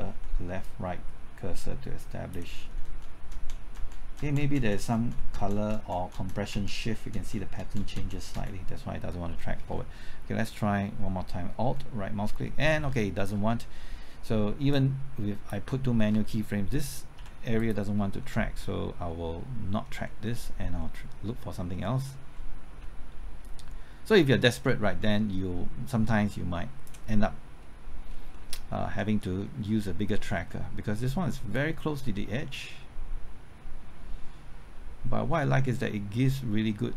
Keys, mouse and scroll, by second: 0.0-0.1 typing, 0.6-2.5 drag, 2.5-3.7 typing, 3.9 Left, 4.1 Right, 4.4 Left, 4.5 Right, 4.7 Left, 4.9 Right, 5.1 Left, 5.3 Right, 5.5 Left, 5.7 Right, 5.9 Left, 6.1 Right, 6.3 Left, 6.5 Right, 6.9 Left, 7.1 Right, 7.3 Left, 7.6 Right, 7.8 Left, 7.9 Right, 8.1 Left, 8.3 Right, 11.7 alt+Right, 14.7-15.9 drag, 17.1 x, 17.5 click, 18.2-18.9 scroll down 1, 18.9-19.3 scroll up 1, 19.3 middle click, 21.7 middle click, 22.3 middle click, 23.4-26.9 drag, 27.9-28.3 scroll up 1, 28.3 middle click, 28.7 scroll up 1, 29.0 middle click, 30.1-31.5 scroll down 1, 31.5-36.9 drag.